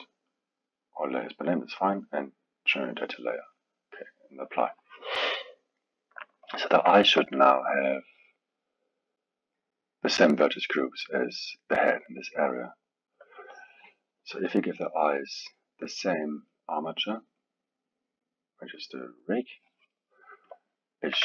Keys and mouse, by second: 2.7-5.1 drag, 5.1-10.8 middle drag, 11.4-14.4 middle drag, 14.9-20.5 drag.